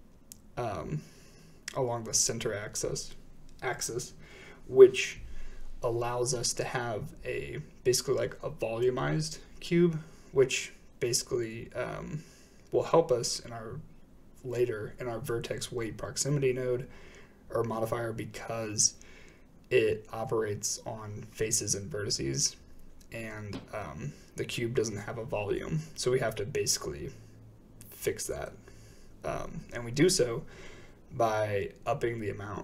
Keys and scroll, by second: 17.3 s, 23.9 ctrl+p, 30.4 typing, 30.6 Return.